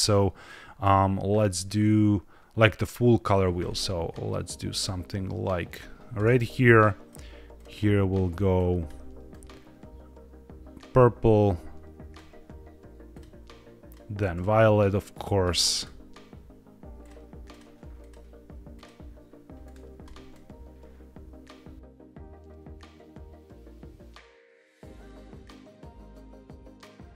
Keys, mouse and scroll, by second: 7.0 click, 7.4 click, 13.0 click, 13.8 click, 16.9 click, 17.9 click, 18.6 click, 22.3-23.4 drag, 23.8-25.0 drag, 25.4 drag.